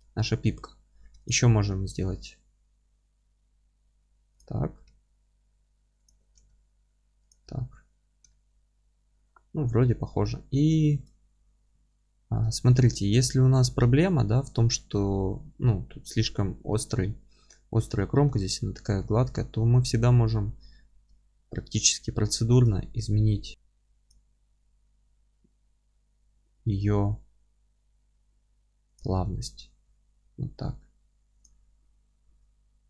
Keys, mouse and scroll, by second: 0.5 Tab, 1.0 3, 1.2 click, 1.8 alt+e, 4.4 click, 4.9 s, 7.3 click, 7.5 scroll down 1, 7.7 Tab, 8.3-10.4 alt+middle drag, 10.4-10.7 scroll up 2, 10.7-11.2 alt+middle drag, 11.2-11.7 scroll up 2, 11.7 Tab, 17.1-17.4 scroll up 2, 17.4-17.8 scroll down 2, 17.8-19.2 middle drag, 19.2 Tab, 22.6 q, 28.9 shift+click, 29.3 Tab, 31.4 click, 32.2 F3.